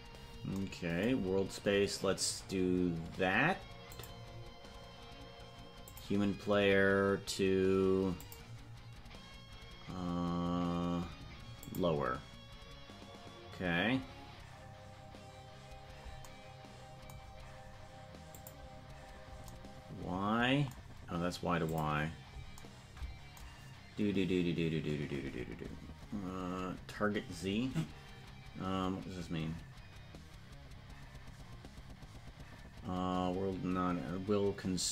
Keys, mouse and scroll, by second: 3.8 click, 8.2-12.3 drag, 18.3 click, 21.6 click.